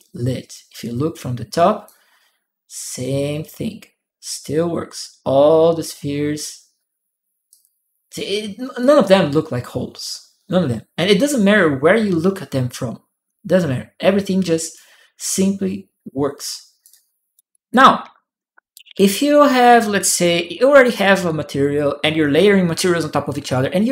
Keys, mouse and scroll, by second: 4.2-6.2 drag, 7.3 click, 8.6-13.3 drag, 14.5-16.6 drag, 16.7 right click, 17.3 click, 18.5 click, 18.6 right click, 19.7 right click, 19.8 click.